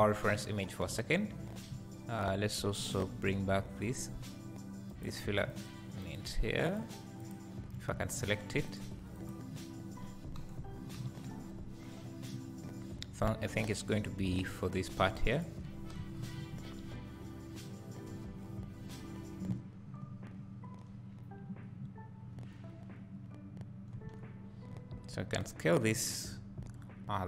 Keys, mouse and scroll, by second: 0.0 scroll down 2, 1.0 scroll up 2, 1.7 `, 4.0 click, 4.9 click, 5.5 click, 6.0 click, 6.7 click, 7.2 click, 7.8 `, 8.7 click, 9.2 click, 10.6 KP_1, 11.0 KP_3, 11.8-12.3 scroll down 2, 12.3-13.7 scroll down 1, 13.7-17.4 drag, 24.0 Tab, 25.1 s.